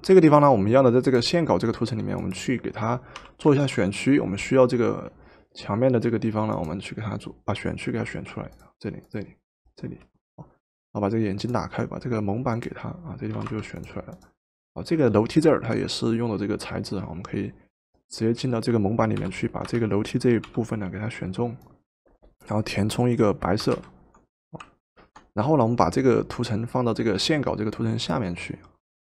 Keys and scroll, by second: 3.8 w, 13.4 v, 19.2 m, 20.5 m, 21.9 Escape, 23.8 alt+Delete, 24.9 ctrl+d.